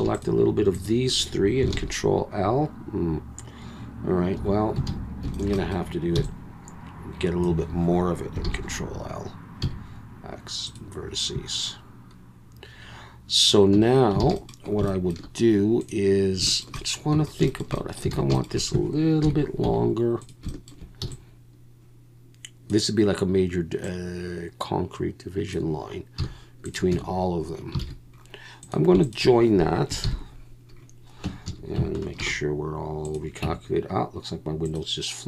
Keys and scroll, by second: 1.7 ctrl+l, 4.3 2, 4.9 alt+a, 6.1 b, 8.5 ctrl+l, 9.6 x, 13.7 Tab, 14.2 alt+a, 17.1 Tab, 18.1 alt+a, 19.2 KP_1, 19.6 z, 21.0 b, 26.2 z, 26.9 Tab, 27.8 alt+a, 30.0 ctrl+j, 31.3 Tab, 31.5 a, 32.2 alt+n, 33.4 Tab.